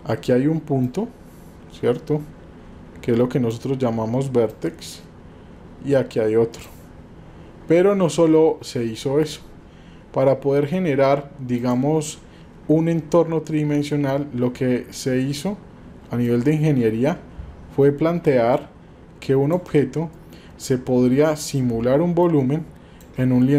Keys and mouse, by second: 16.3-19.6 drag, 22.3 shift+click.